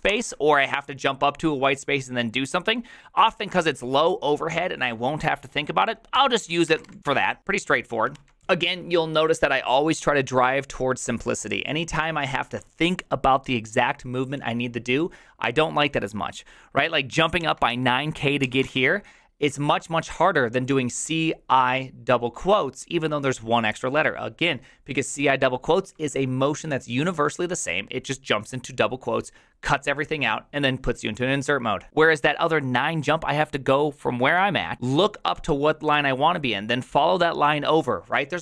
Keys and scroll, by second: 0.0-0.5 typing, 5.9-7.3 typing, 8.1 ctrl+c, 17.1-19.1 typing.